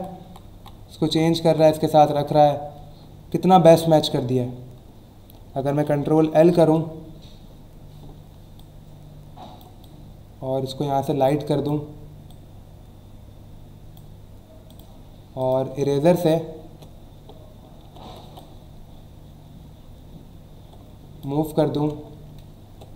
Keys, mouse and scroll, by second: 3.7 click, 8.6 alt+click, 12.3 click, 14.7 click, 15.4 click, 15.7 e, 18.4 click, 21.5 alt+scroll down 1.